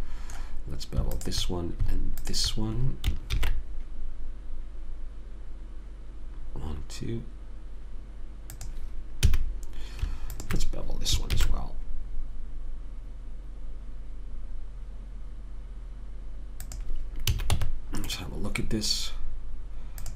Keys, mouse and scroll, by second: 0.0 a, 1.5-3.1 right drag, 3.1 click, 3.7 ctrl+b, 9.6 a, 10.7 click, 11.7 ctrl+b, 17.6 a, 17.8 Tab, 19.0-20.1 middle drag.